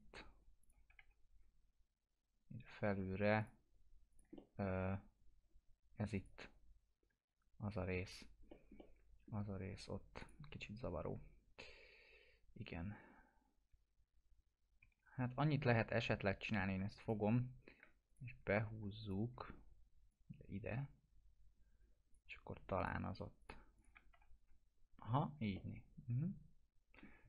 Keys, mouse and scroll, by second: 0.9 F4, 1.4-1.8 scroll up 1, 3.4 click, 4.3 alt+middle click, 4.9-5.2 scroll up 1, 6.1 click, 8.1 scroll down 1, 8.5 middle click, 8.7-9.4 alt+middle click, 10.2 click, 14.8 1, 15.3-16.4 scroll up 2, 16.4 click, 17.3 scroll down 1, 18.0 ctrl+click, 19.4 scroll down 1, 20.1-22.3 drag, 24.1 F4, 25.0 scroll down 1, 25.5-27.1 alt+middle drag.